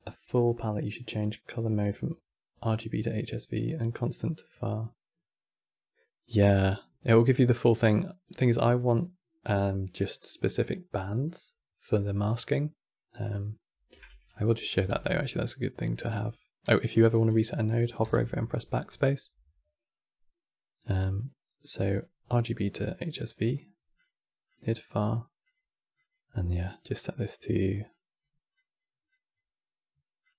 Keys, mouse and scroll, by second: 14.4 click, 14.6 shift+d, 15.7 click, 17.4 click, 17.7 BackSpace, 21.6-25.2 drag, 25.6-26.3 drag, 29.9-30.3 drag.